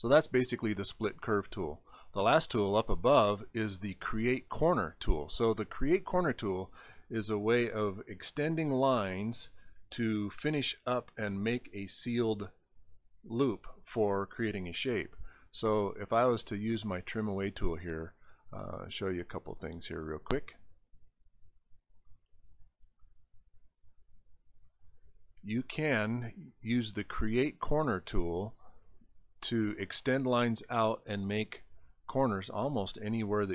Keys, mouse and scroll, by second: 2.1 click, 8.3 click, 10.0 click, 12.5 scroll down 1, 16.6 click, 17.2-17.6 scroll down 7, 19.2 click, 20.3 click, 23.9 click, 26.7 click, 29.5 click, 31.3 click.